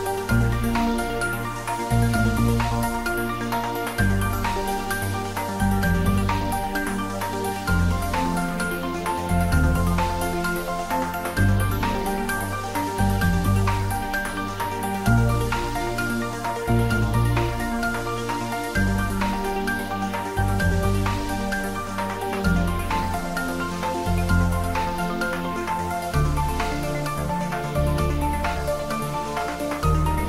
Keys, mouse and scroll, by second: 2.1 click, 2.2 middle click, 2.7 shift+middle click, 3.7 ctrl+middle click, 3.8 shift+middle click, 4.2 click, 4.5 shift+click, 5.0 x, 5.9 ctrl+s, 6.4 click, 7.6 click, 10.0 click, 11.1-12.2 scroll down 1, 12.8-14.5 scroll up 1, 14.6 click, 16.1 click, 18.3 click, 19.9 click, 20.2 ctrl+s, 20.4 click, 23.2 click, 23.5 s, 25.6 click, 26.4 Tab, 26.6 click, 27.6 3, 27.7 click.